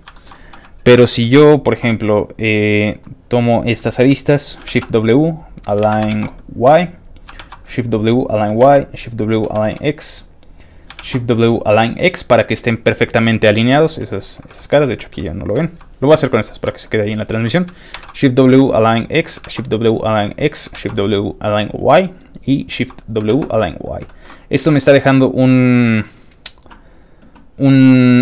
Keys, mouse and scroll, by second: 0.1 shift+middle click, 0.3 shift+middle click, 0.6 shift+middle click, 0.9 scroll up 2, 1.3 shift+middle click, 2.7 shift+click, 4.7 shift+w, 5.2 click, 5.9 ctrl+z, 6.2 shift+w, 6.6 ctrl+shift+click, 7.1 shift+click, 7.4 shift+w, 7.6 shift+click, 8.2 shift+click, 8.7 shift+w, 9.1 shift+click, 9.6 shift+w, 9.9 shift+click, 10.4 shift+click, 11.0 shift+w, 11.2 shift+click, 14.5 shift+middle click, 14.9 middle click, 15.2-15.6 scroll up 2, 15.6 shift+middle click, 16.2 shift+click, 16.7 shift+middle click, 16.7 scroll up 1, 18.0 shift+w, 18.5 click, 19.1 click, 19.5 shift+w, 19.7 shift+click, 20.4 shift+click, 20.8 shift+w, 21.5 shift+click, 22.2 click, 22.5 click, 23.3 shift+w, 23.6 shift+click, 24.0 shift+middle click, 24.8 middle click, 24.9 click.